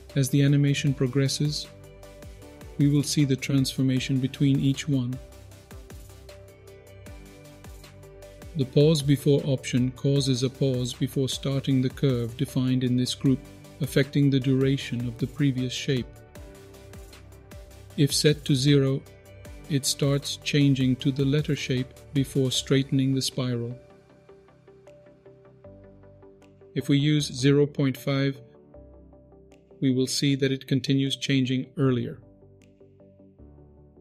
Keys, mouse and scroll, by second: 0.7-8.2 drag, 9.0 middle click, 16.9-18.1 drag, 20.4-25.7 shift+drag, 26.9-28.2 drag, 29.2-34.0 shift+drag.